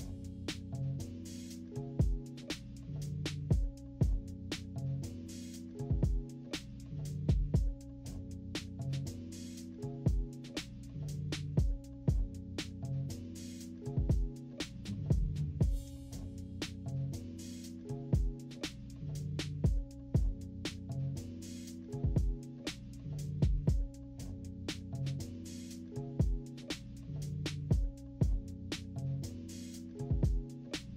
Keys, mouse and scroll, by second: 0.9 click, 1.2 click, 1.5 click, 2.4 click, 3.6 click, 4.9 click, 5.9 click, 7.6 click, 8.1 click, 9.3 click, 10.5 click, 10.8 click, 11.9 click, 13.2 -, 13.6 scroll down 1, 13.6 =, 14.5 click, 15.9 click, 16.4 click, 16.5 click, 17.6 click, 20.4 click, 21.1 click, 21.8 -, 21.9 scroll down 2, 22.1 -, 22.4 =, 22.7 scroll down 2, 23.1 click, 23.9 click, 24.3 click, 25.1 click, 25.7 click, 26.7 click, 27.0 click, 27.4 click, 28.0 click, 28.4 click, 28.7 click, 29.5 -, 29.9 =, 30.5 scroll up 2, 30.7 click.